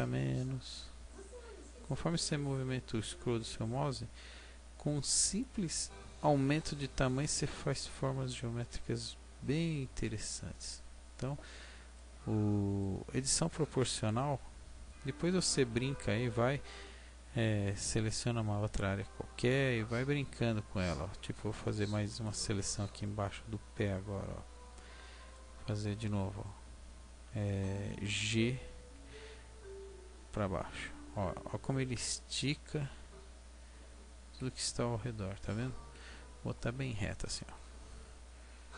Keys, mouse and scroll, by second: 5.4 click, 6.0 Tab, 6.6 middle click, 9.9 Tab, 10.8-11.2 scroll up 1, 11.2-11.7 scroll down 2, 11.7 scroll down 2, 12.1 middle click, 14.3-14.6 scroll down 1, 14.9 middle click, 22.2 alt+right click, 23.0 middle click, 28.8 g, 35.9 KP_1.